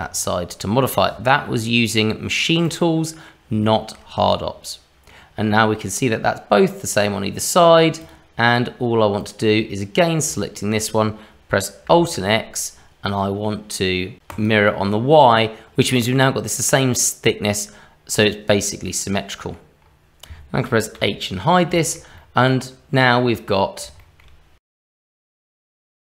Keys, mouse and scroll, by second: 2.8 middle click, 3.6 shift+middle click, 4.3 middle click, 6.8 click, 8.0 click, 9.2 click, 10.4 shift+middle click, 12.0 alt+x, 14.3 click, 18.5-18.9 scroll down 1, 18.9 middle click, 19.8-20.9 scroll up 1, 20.9 h, 21.7 shift+middle click, 22.1 middle click, 24.8 click.